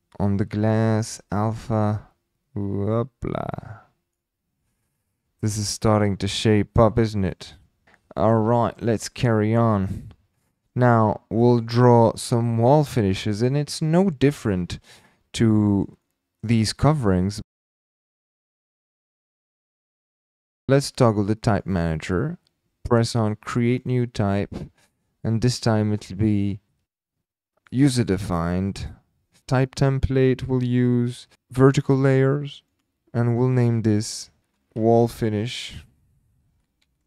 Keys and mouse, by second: 2.0-4.1 drag, 6.8-7.3 middle drag, 10.3-10.7 middle drag, 11.4 middle click, 12.3-12.6 middle drag, 12.9 shift+middle drag, 14.8-15.8 middle drag, 16.0-16.4 middle drag, 17.1 shift+click, 19.3 click, 20.5 click, 21.4-37.0 drag, 35.9 BackSpace.